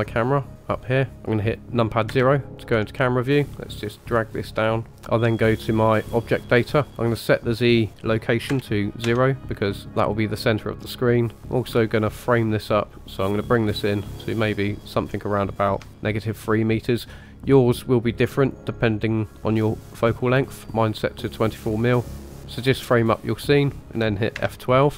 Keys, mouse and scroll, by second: 2.1 KP_0, 2.9 scroll down 1, 4.1 click, 6.0 click, 7.5-10.8 drag, 11.4-15.8 drag, 18.4 click, 22.4 click.